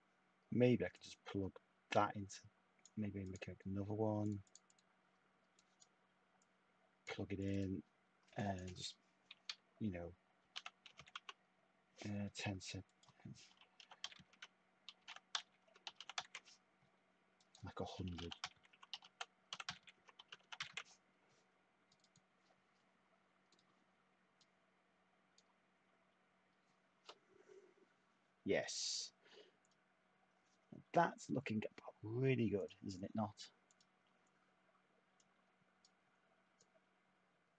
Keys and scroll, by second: 10.1-11.4 typing, 13.2-16.8 typing, 17.9-21.2 typing.